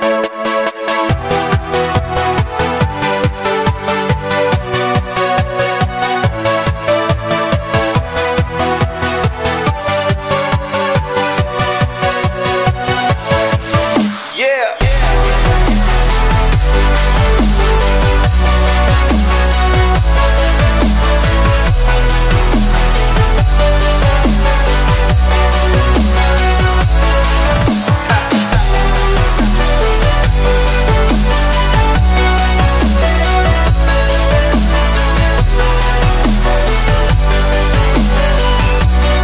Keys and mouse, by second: 1.5 click, 4.1 click, 4.4-10.2 middle drag, 11.2 click, 12.7-14.3 middle drag, 12.7-15.9 right drag, 15.6 KP_0, 15.9-17.2 drag, 15.9 KP_0, 17.8-18.9 middle drag, 19.8 click, 21.0-23.5 drag, 23.8-25.1 middle drag, 27.2-28.3 middle drag, 28.5 shift+d, 29.5-30.7 drag, 31.0 shift+click, 31.5 shift+d, 31.9 click, 32.5 shift+d, 32.7 click, 33.4 middle click, 34.6-38.2 drag, 38.6 click.